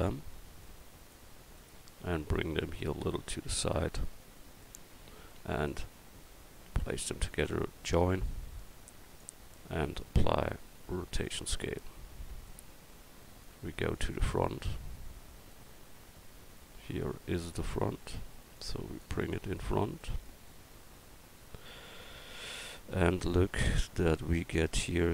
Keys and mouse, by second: 0.6-1.6 drag, 3.5-5.7 drag, 7.6 click, 17.0-17.9 middle drag, 24.2-25.1 middle drag.